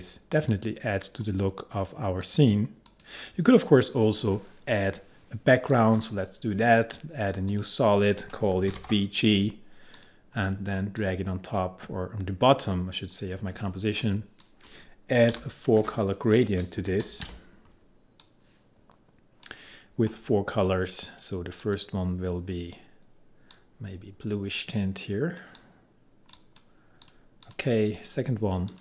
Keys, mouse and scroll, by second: 5.8 click, 8.7 shift+b, 10.0-14.5 drag, 15.4 4, 15.9 space, 16.9 BackSpace, 17.3 -, 18.3-28.8 drag.